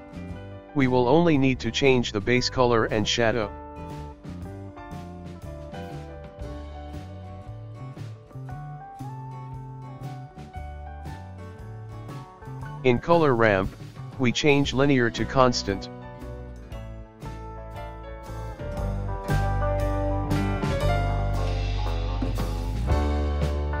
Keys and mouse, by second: 0.6 click, 5.9 click, 13.5-16.6 drag, 21.6-23.8 ctrl+middle drag.